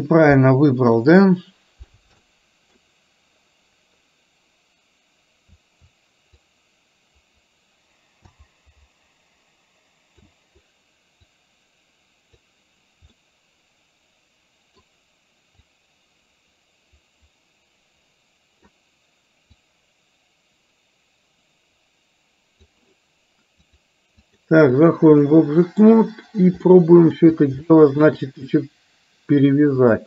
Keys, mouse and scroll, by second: 1.1 middle click, 2.4 middle click, 6.5-10.4 drag, 11.2-12.4 drag, 13.2-15.9 middle drag, 15.9-18.7 drag, 19.7-22.7 drag, 23.6 click, 24.4 click, 25.2-25.9 middle drag, 26.7-27.2 middle drag, 27.7-28.1 shift+middle drag, 29.9 click.